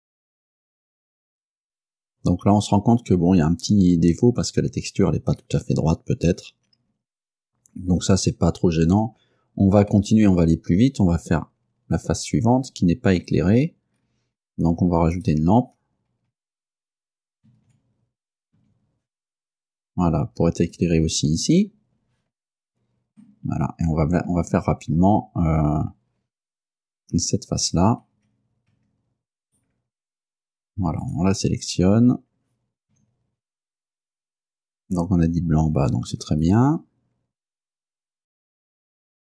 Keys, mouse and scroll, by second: 0.0 scroll up 2, 0.1 scroll down 2, 0.6 shift+middle click, 7.4 scroll down 2, 8.0 scroll up 1, 8.5-8.8 scroll down 1, 10.0-13.4 middle drag, 13.6-14.7 scroll down 3, 15.3 right click, 17.6 shift+d, 18.6 Return, 19.7-21.0 drag, 21.1-22.0 scroll up 3, 22.3 scroll up 2, 23.3-24.5 middle drag, 28.2 Tab, 29.5 right click, 30.2 Tab, 31.1 right click, 33.0 r, 36.5 ctrl+click, 38.3 right click, 38.4 shift+right click, 38.7-39.3 typing, 39.0 click, 39.0 shift+right click.